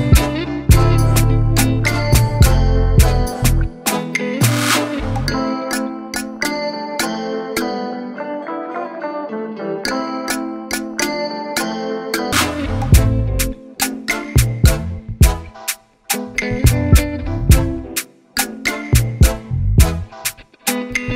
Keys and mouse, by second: 0.4 Up, 2.5 click, 3.8 right click, 4.7 click, 6.2 click, 10.1 click, 11.0 click, 12.1 click, 12.9 click, 13.3 right click, 14.3 click, 16.7 click, 18.3 click.